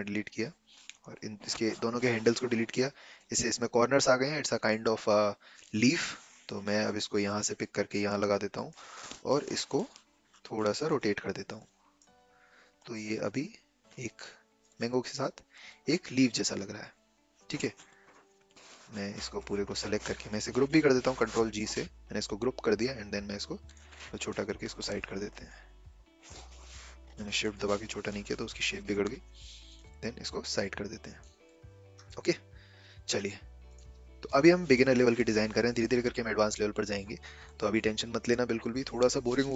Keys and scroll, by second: 6.0 v, 21.0 ctrl+g, 26.6 ctrl+z.